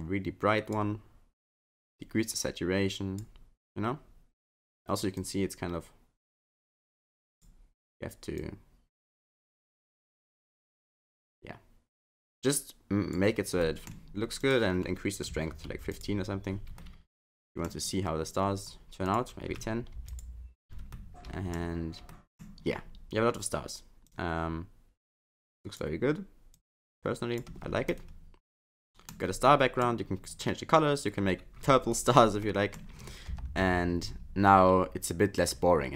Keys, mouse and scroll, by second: 5.2 click, 8.4 click, 13.6 middle click, 14.4 click, 16.8 middle click, 19.1 click, 21.0 middle click, 22.1 middle click, 24.1 click, 26.6 click, 27.9 middle click, 29.5 middle click, 32.4 middle click, 33.3 KP_0, 34.1-34.7 scroll down 6, 34.7-35.2 scroll up 3.